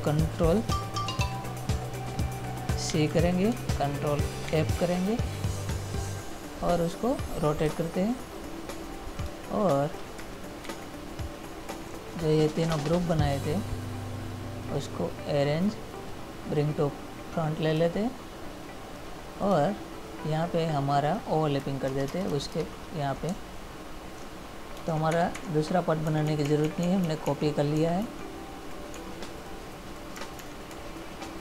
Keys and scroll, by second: 3.1 ctrl+c, 4.7 ctrl+f, 10.9 ctrl+z, 23.6 space, 26.3 Left, 28.0 Right, 30.6 ctrl+-.